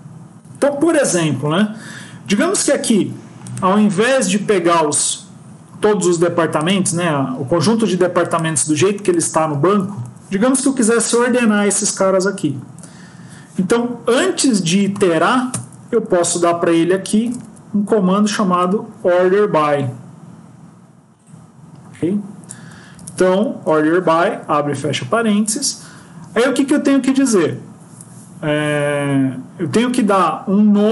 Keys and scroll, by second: 10.1 Up, 10.7 End, 11.3 Left, 23.5 Left.